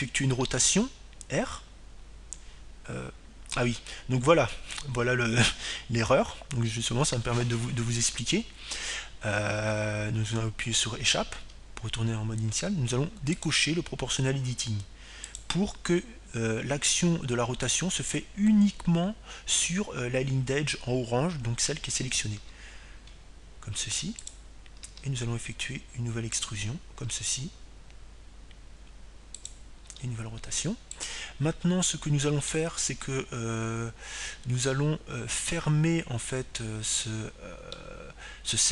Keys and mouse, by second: 1.7-4.2 drag, 3.0 r, 16.0-18.3 drag, 25.0 r, 27.0-28.7 drag, 27.5 e, 29.1-30.9 drag, 29.8 e, 32.2-35.6 drag, 32.5 r, 35.3-37.0 middle drag.